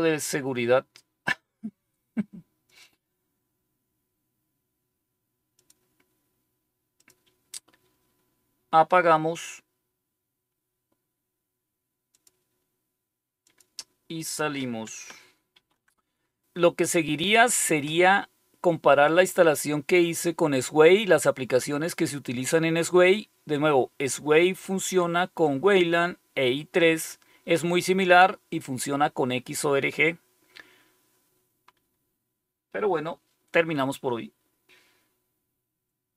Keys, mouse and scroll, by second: 2.6 click, 5.5 click, 6.9 click, 12.1 click, 13.4 click, 15.5 super+5, 36.1 click.